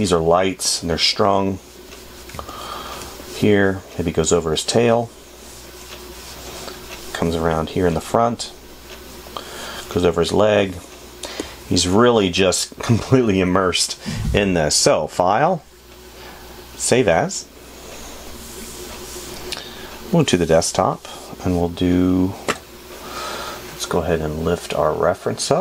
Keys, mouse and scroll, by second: 2.9 space.